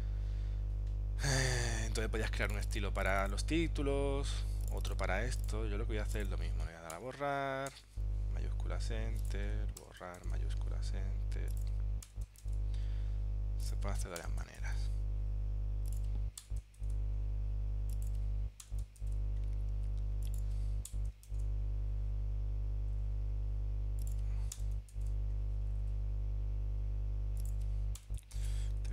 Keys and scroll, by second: 7.8 shift+Return, 10.3 shift+Return, 12.5 shift+Return, 14.7 shift+Return, 16.9 shift+Return, 19.1 shift+Return, 21.4 shift+Return, 25.0 shift+Return, 28.4 shift+Return.